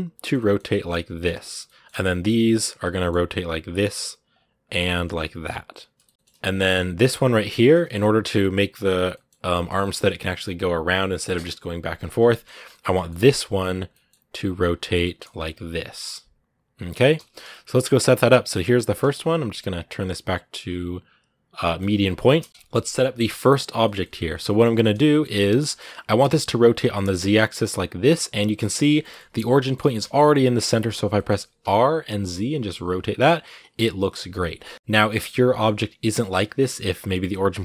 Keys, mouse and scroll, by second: 0.5 r, 1.4 shift+middle click, 1.8 scroll up 1, 2.4 click, 2.8 middle click, 3.1 r, 4.2 click, 4.7 r, 5.7 scroll down 2, 5.8 shift+middle click, 6.1-6.9 scroll up 1, 6.9 right click, 7.2 shift+middle click, 7.6 scroll up 1, 7.7-9.1 middle drag, 9.1 scroll down 2, 9.3 middle click, 9.7-11.8 scroll down 1, 11.8 scroll up 3, 12.0 middle click, 12.4 scroll up 1, 12.5-13.6 shift+middle drag, 13.6 click, 13.7 middle click, 14.3 click, 14.6 shift+middle click, 15.1 r, 16.7 middle click, 16.9 a, 17.3 middle click, 17.7 scroll up 2, 18.4-21.8 right drag, 21.8 middle click, 22.1 shift+c, 22.3 middle click, 22.5 KP_Decimal, 22.8 scroll down 1, 23.1 g, 23.6 shift+middle click, 23.9 scroll up 2, 24.1-25.1 shift+middle drag, 25.1 scroll up 1, 25.4 middle click, 26.0 r, 28.8 middle click, 29.6 r, 30.5 middle click, 31.4 r, 34.9 middle click, 35.0 scroll up 2, 35.3 middle click, 36.2 r.